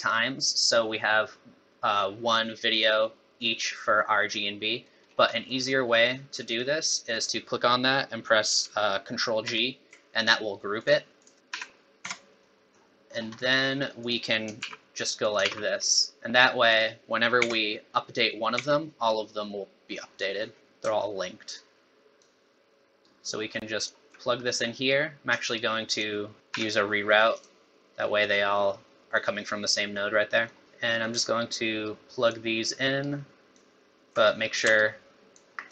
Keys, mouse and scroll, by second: 0.6 middle click, 4.7 middle click, 5.1 scroll up 5, 5.3 middle click, 6.2-6.6 scroll down 3, 6.4 middle click, 7.1 click, 9.9 ctrl+g, 10.8 click, 11.2 click, 11.5 g, 12.0 Tab, 12.4 middle click, 13.1 scroll down 2, 13.4 middle click, 14.0 click, 14.6 shift+d, 15.5 shift+d, 16.7 click, 17.4 Tab, 18.7 Tab, 21.5 alt+right click, 23.0 alt+right click, 24.4 middle click, 25.5 shift+right click, 26.5 g, 29.6 middle click, 30.3 middle click, 30.6 click, 30.6 alt+right click, 31.8 alt+right click, 33.0 alt+right click, 34.8 ctrl+right click.